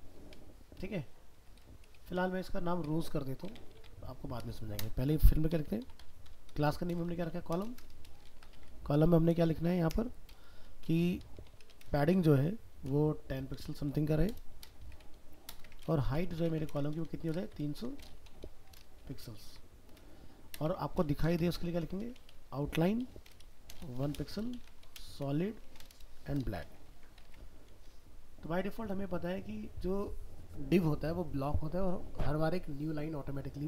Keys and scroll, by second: 19.2 ctrl+s, 26.9 ctrl+s, 27.3 alt+Tab.